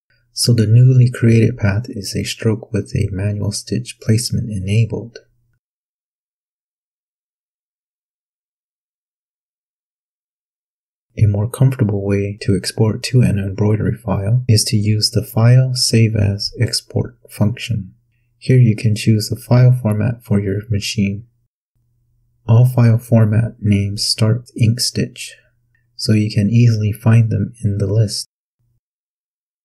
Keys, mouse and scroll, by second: 1.3-1.8 ctrl+scroll up 2, 2.4-3.1 ctrl+scroll up 2, 3.8-4.1 ctrl+scroll up 2, 5.4 ctrl+scroll down 2, 14.8 click, 16.2 click, 19.9 click, 21.0 click.